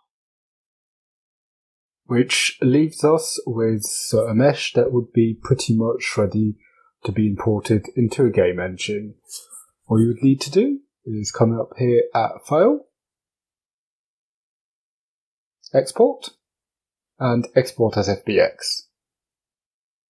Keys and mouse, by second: 11.7-20.0 drag.